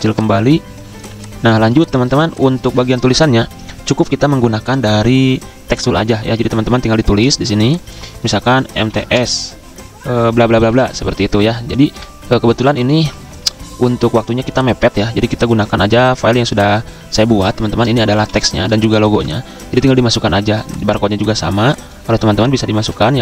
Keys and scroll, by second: 1.1-2.6 typing, 8.1 Caps_Lock, 8.5-9.4 typing, 11.0 Escape, 11.7 Delete, 18.3 z, 19.1 v, 20.2 ctrl+z, 22.2 ctrl+z, 22.5-23.2 typing.